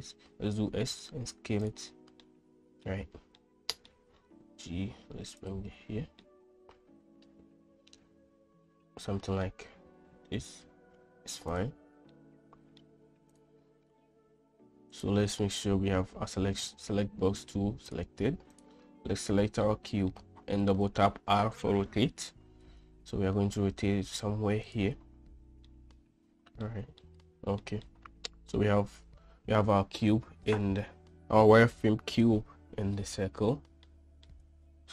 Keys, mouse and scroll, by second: 0.5 s, 2.3-2.9 middle drag, 3.4-4.0 middle drag, 4.6 g, 6.3-9.5 middle drag, 10.6 g, 12.2-12.9 middle drag, 13.4 drag, 15.0 click, 18.6 click, 19.7-20.2 middle drag, 20.7 r, 25.8-26.7 middle drag, 27.1-27.7 shift+middle drag, 27.9-28.6 middle drag, 34.0-34.3 middle drag.